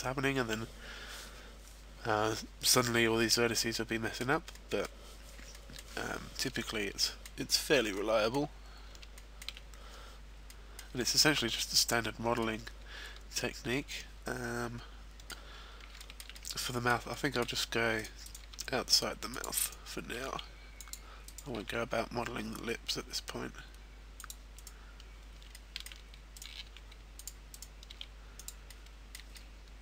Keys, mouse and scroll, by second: 0.6-1.0 scroll up 1, 1.3-1.8 scroll down 2, 3.7 middle click, 5.4 middle click, 7.0 middle click, 8.0 middle click, 8.5-9.9 scroll up 3, 9.1 shift+middle click, 10.5 middle click, 10.5 scroll down 2, 11.2-11.7 scroll up 1, 12.4 middle click, 16.0 shift+middle click, 16.3 middle click, 17.1 shift+middle click, 18.0 right click, 18.2 right click, 18.8 e, 19.4 click, 19.6 right click, 20.2 e, 20.9 click, 21.2 right click, 21.8 e, 24.3 click, 24.5 right click, 25.5 shift+middle click, 27.0 e, 27.2 click, 27.4 right click, 28.5 click, 28.5 e, 28.7 middle click.